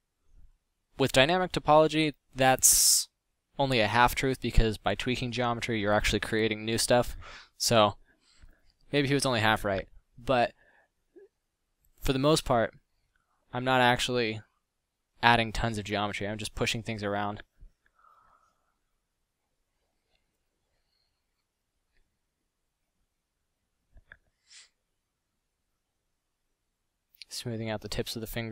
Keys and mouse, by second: 2.7-3.4 middle drag, 3.6-4.1 middle drag, 4.9 middle drag, 5.5 middle drag, 14.9 f, 19.1 f, 20.2 f, 24.4 f.